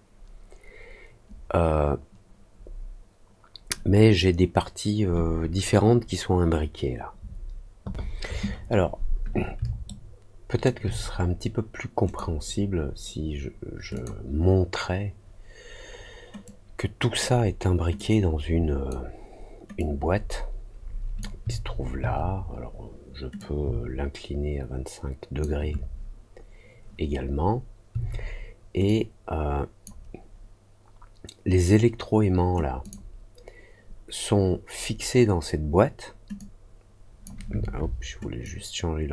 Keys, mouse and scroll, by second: 9.8 alt+middle click, 12.0 click, 13.9 click, 16.4 click, 17.9 click, 19.7-21.1 drag, 23.3-25.3 shift+drag, 28.8 click, 32.8 click, 36.3 click, 38.4-39.1 drag.